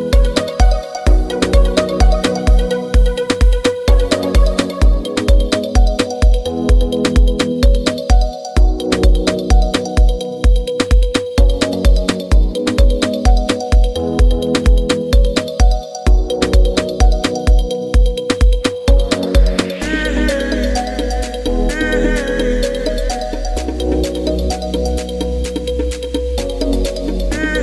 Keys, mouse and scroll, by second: 1.4-27.6 drag.